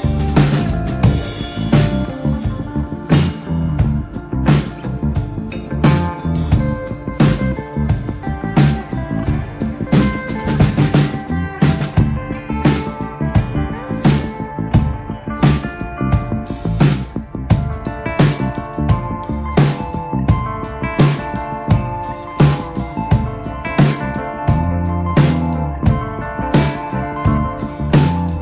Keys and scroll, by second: 1.4 b, 9.3 ctrl+z, 9.9 ctrl+z, 10.7 space, 12.1 space, 14.4 space, 17.0 space, 19.5 2, 20.1 5, 20.9 space, 22.7 ctrl+z, 23.9 ctrl+alt+z, 25.6 ctrl+z.